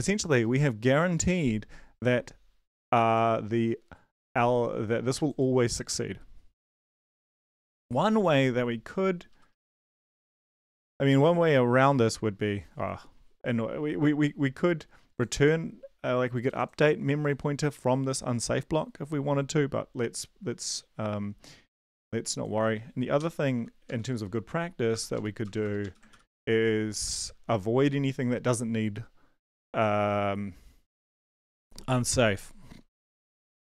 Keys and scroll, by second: 8.9 Right, 9.3 ctrl+shift+Left, 9.5 ctrl+shift+Left, 9.6 ctrl+shift+Left, 23.2 ctrl+x, 23.5 Delete, 23.8 Up, 24.2 Down, 24.9 BackSpace, 25.1 Up, 25.4 Return, 25.6 Return, 25.8 Up, 26.1 ctrl+v, 27.3 ctrl+s.